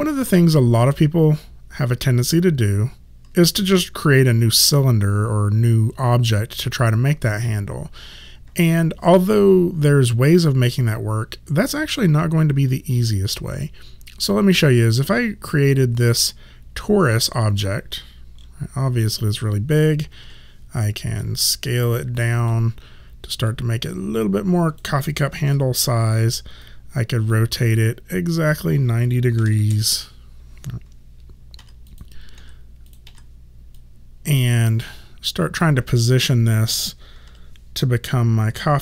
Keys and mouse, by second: 0.0 right click, 0.9 click, 17.2 click, 20.3 r, 21.3 click, 23.6 click, 25.5 e, 26.7 click, 29.4 KP_9, 29.5 KP_0, 31.6 w, 31.9 click, 32.4 w, 32.9 click, 33.1 w, 33.8 click, 37.3 r, 38.1 click.